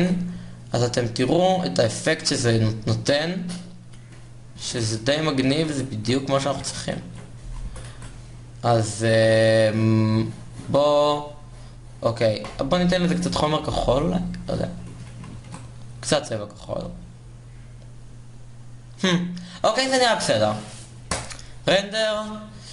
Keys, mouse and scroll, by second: 1.5 shift+z, 6.2 shift+z, 6.5 Tab, 6.9 Tab, 7.2 a, 8.2 a, 9.2 g, 10.9 Tab, 16.8 shift+z, 21.1 shift+z.